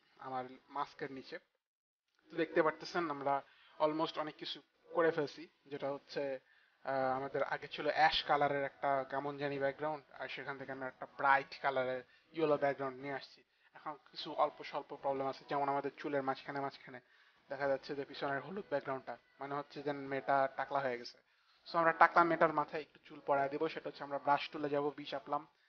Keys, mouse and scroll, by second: 24.8 b.